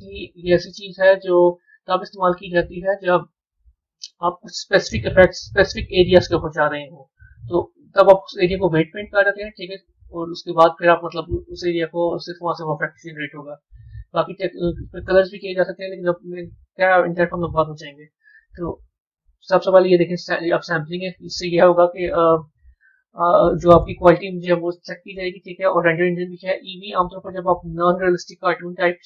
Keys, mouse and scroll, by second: 1.2-6.6 middle drag, 11.0-13.7 drag, 14.9-18.1 middle drag, 19.4 click, 26.2-29.0 drag.